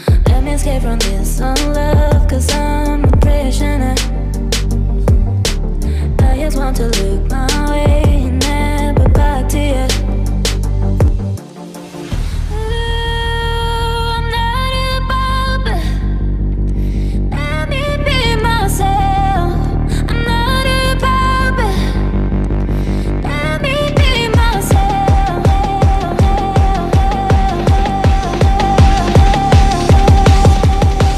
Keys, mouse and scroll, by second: 4.9 right click.